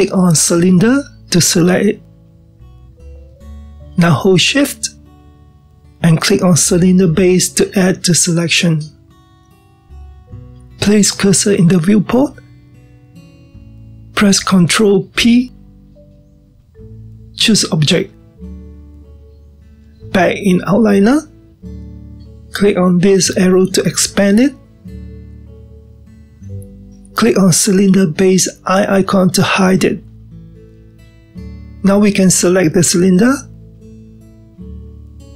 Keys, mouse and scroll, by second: 1.6 click, 8.2 shift+click, 15.6 ctrl+p, 24.8 click, 30.2 click, 33.4 click.